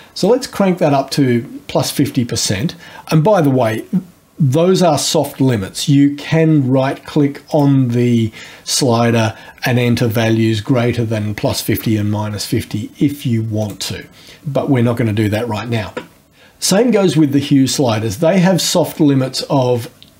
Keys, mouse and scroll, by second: 0.4-3.5 scroll up 2, 7.5 right click, 13.6 click, 18.9-20.1 drag.